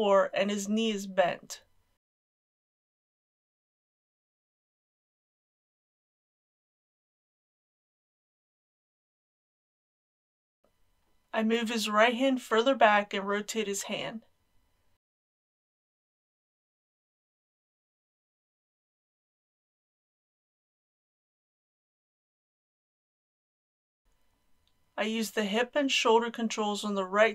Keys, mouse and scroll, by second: 0.1 r, 4.7 click, 7.7 a, 8.1 click, 8.6 g, 10.6 click, 11.8 g, 12.1 x, 14.0 click, 14.5 g, 14.8 z, 17.1 click, 18.7 g, 19.3 click, 19.4 g, 19.9 click, 20.1 r, 21.6 g, 22.1 click, 23.9 middle click, 24.7-27.1 scroll up 1, 27.1 click.